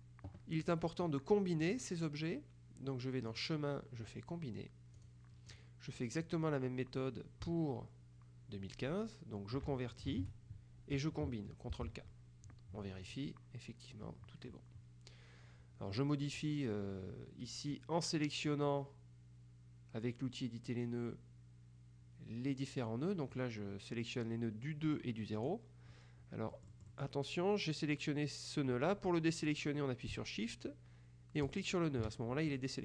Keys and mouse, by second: 0.7 click, 3.4 click, 5.1 click, 6.3 click, 10.2 ctrl+shift+c, 11.8 ctrl+k, 13.1 click, 18.5-26.0 drag, 26.6-27.6 drag, 31.5 shift+click.